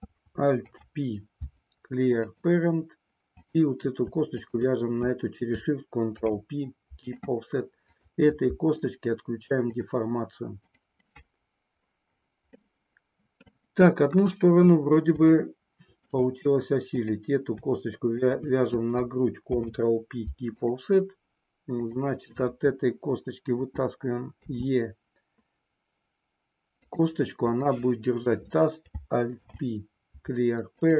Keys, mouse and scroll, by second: 0.6 alt+p, 4.4 shift+click, 6.0 ctrl+p, 7.9 click, 10.7 click, 12.7 middle click, 14.0 KP_1, 15.4 shift+middle click, 16.9 click, 18.1 shift+click, 19.5 ctrl+p, 24.5 e, 26.9 click, 29.4 alt+p.